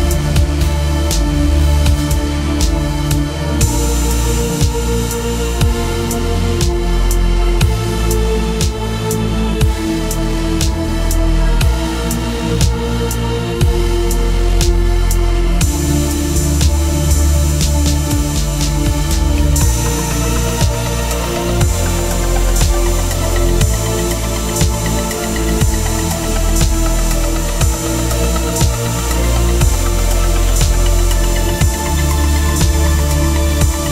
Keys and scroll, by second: 1.6-3.0 typing, 7.4 space, 8.4-11.5 typing, 12.1 ctrl+Return, 13.8-16.1 typing, 17.2 Return, 29.4-30.3 typing.